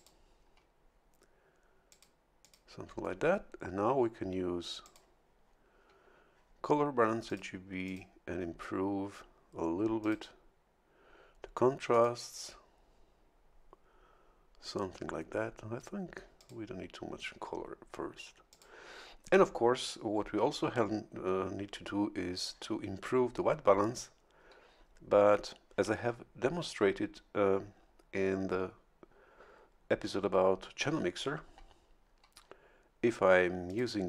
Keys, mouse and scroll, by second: 1.9 click, 2.4 click, 4.8 click, 7.3 click, 7.8 click, 10.0 click, 11.9 click, 16.4 click, 18.5 click, 33.7 click.